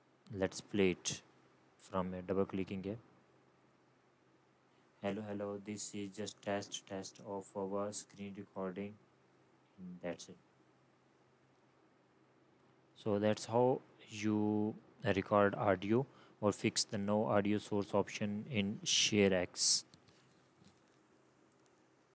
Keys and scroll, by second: 4.1 BackSpace.